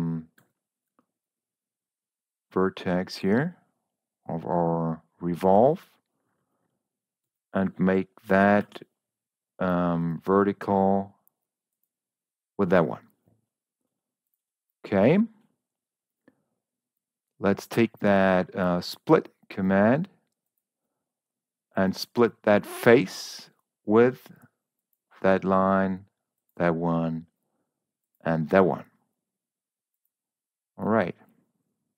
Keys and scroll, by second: 0.8 u, 7.6 Escape, 8.5 v.